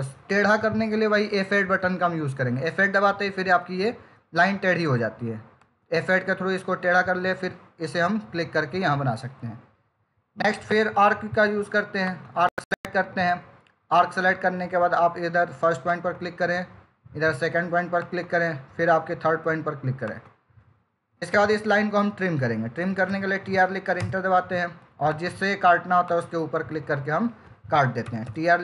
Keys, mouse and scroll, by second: 1.5 F8, 7.9 click, 12.1 click, 15.7 click, 22.5-23.4 typing, 23.8 Return, 24.9 click, 27.1 Escape, 27.9-28.2 typing.